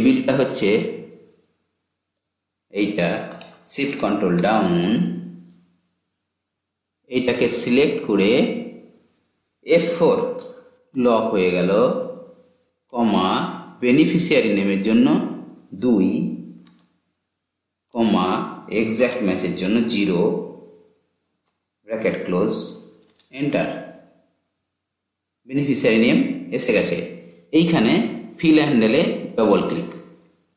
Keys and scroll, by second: 3.9 ctrl+shift+Down, 9.5 F4.